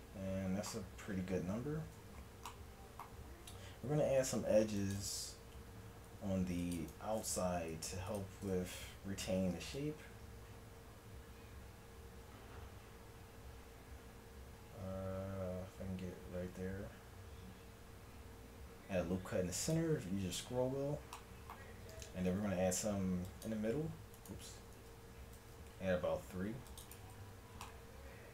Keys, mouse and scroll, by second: 1.9 a, 3.8 ctrl+r, 6.1 ctrl+r, 9.4 ctrl+b, 20.5 a, 20.9-22.3 middle drag, 22.3 ctrl+r, 24.8 ctrl+z, 25.4 ctrl+r, 27.3 Tab.